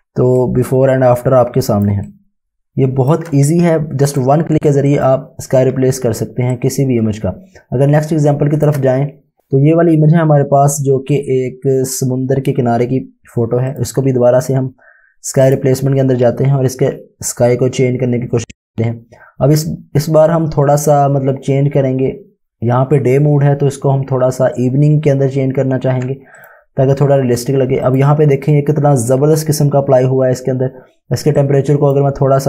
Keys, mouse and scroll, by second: 0.4 click, 2.2 click, 4.1 click, 6.3 space, 6.7 click, 6.8 space, 9.4 ctrl+shift+v, 13.4-14.2 typing, 13.7 click, 31.4 click.